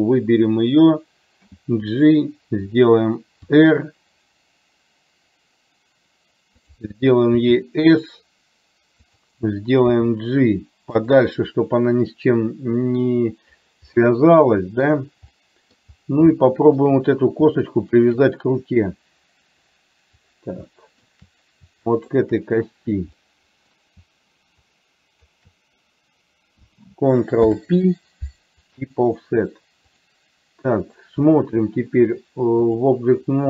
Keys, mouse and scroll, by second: 0.0 click, 2.1 g, 3.5 r, 7.4 s, 10.0 g, 14.0-16.3 middle drag, 15.9-16.3 scroll down 1, 16.4 shift+middle click, 16.4-16.9 shift+scroll up 1, 20.8 shift+middle click, 22.1 shift+click, 23.3 middle click, 24.9 shift+click, 27.5 ctrl+p, 30.1 click, 31.4-33.0 drag.